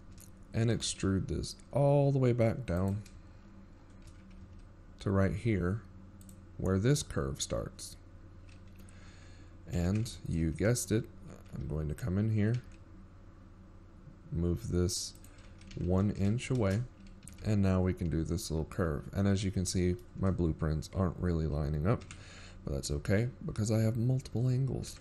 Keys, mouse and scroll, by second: 1.6 scroll down 1, 1.6 KP_1, 2.5-3.1 shift+scroll down 14, 3.4 z, 4.0-4.8 shift+scroll down 3, 5.0 e, 7.5-8.3 shift+scroll down 14, 8.5 g, 14.2 ctrl+KP_3, 14.8 z, 15.2-15.7 scroll up 7, 15.9 g, 21.8 z, 22.3-23.0 scroll down 3, 24.2 shift+middle click.